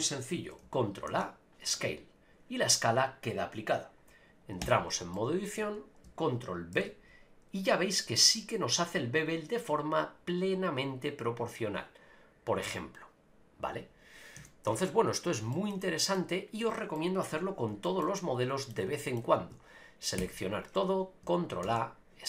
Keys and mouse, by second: 1.1 ctrl+a, 4.6 Tab, 5.1 middle click, 6.7 ctrl+b, 13.7 click, 14.4 a, 14.7 Tab, 15.5 shift+middle drag, 15.8 middle click, 16.9 middle click, 17.3 n, 17.8 shift+middle click, 18.2 middle click, 19.0 shift+middle click, 20.2 a, 21.6 ctrl+a.